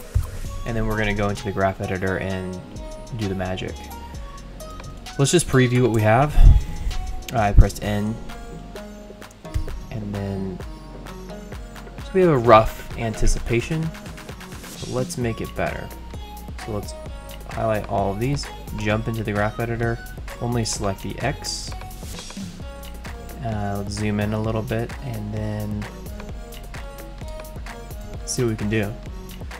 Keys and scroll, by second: 0.1 F9, 6.3 shift+n, 9.5 ctrl+0, 14.8 space.